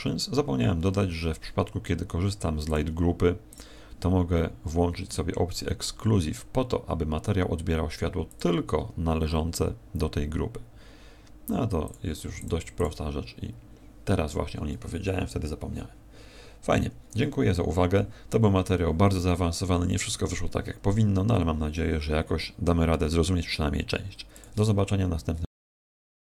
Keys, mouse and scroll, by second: 2.6 click, 8.3 click, 11.8 click, 12.3 click, 12.7 click.